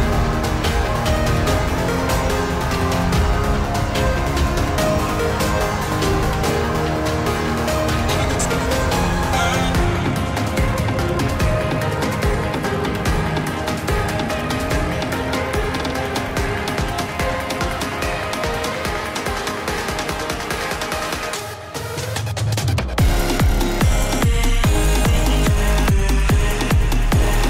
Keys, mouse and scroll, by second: 0.6-4.4 drag, 4.4 middle click, 4.9 click, 5.4 Return, 6.4 shift+3, 6.9 space, 8.0-9.2 typing, 10.9 Return, 11.9-12.7 typing, 13.3 Return, 14.1-16.5 typing, 17.2 click, 18.1-20.4 typing, 21.1-23.6 drag, 25.6-27.1 drag, 27.1 Return.